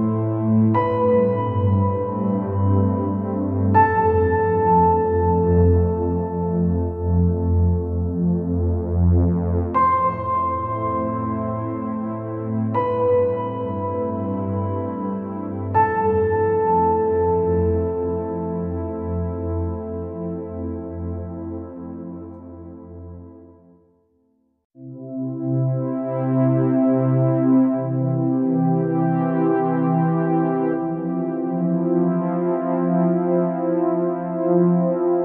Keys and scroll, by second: 31.0-31.6 space.